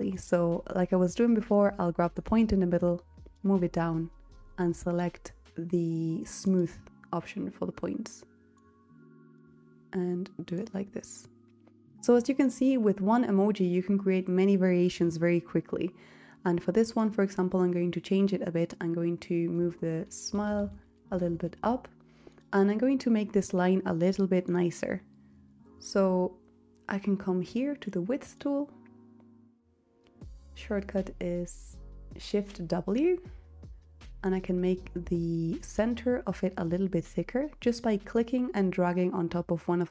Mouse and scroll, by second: 0.8 click.